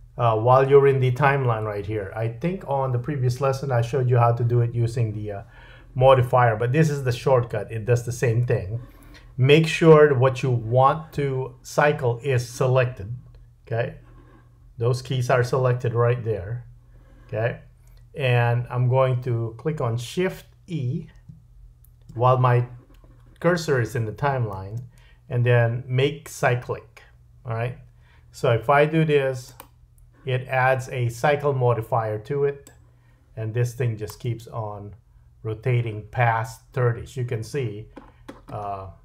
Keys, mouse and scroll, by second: 24.5 shift+e, 31.0-32.7 scroll down 3, 32.7-33.4 drag, 34.3 space, 37.6-39.0 scroll down 9.